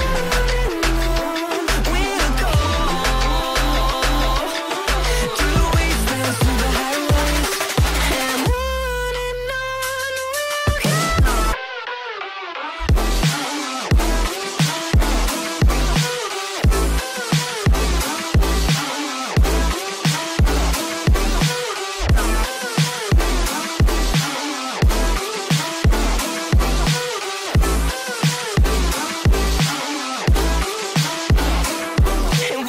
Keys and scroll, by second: 2.3 space, 2.5 Escape, 7.6 F4, 9.5 c, 10.1 shift+F2, 10.4 Escape, 16.2 Escape, 18.0 F4, 22.1 F2, 32.4 shift+F2.